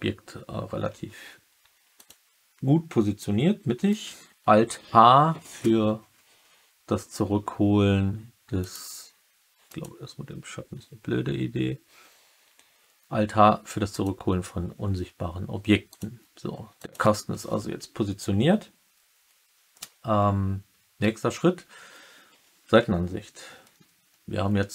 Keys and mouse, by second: 1.9 click, 3.8 alt+h, 9.6 click, 13.8 click, 15.8 click, 16.7 click.